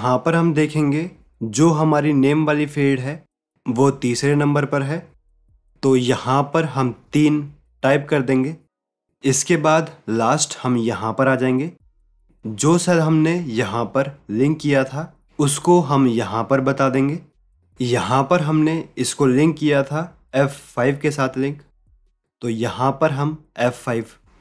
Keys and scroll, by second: 5.6 alt+Tab, 13.4 alt+Tab, 22.6 alt+Tab.